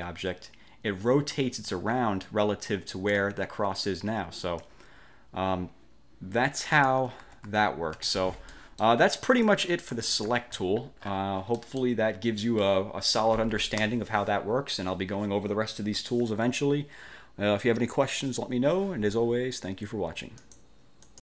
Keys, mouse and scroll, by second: 4.7-7.2 drag, 7.4 ctrl+z, 8.7 click, 9.6 click, 10.8-11.4 scroll up 2, 11.7 click, 20.6 click, 21.2 click.